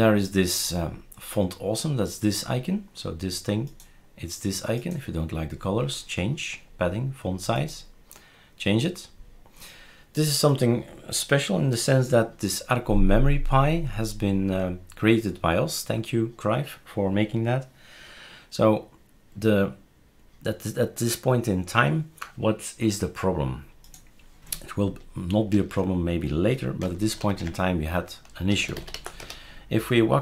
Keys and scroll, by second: 27.2 ctrl+alt+t, 28.2-29.4 typing.